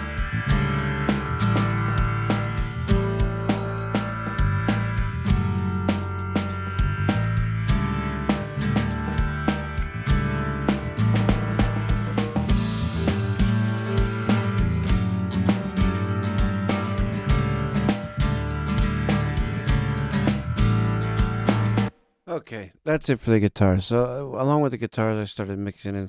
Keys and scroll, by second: 21.6 space.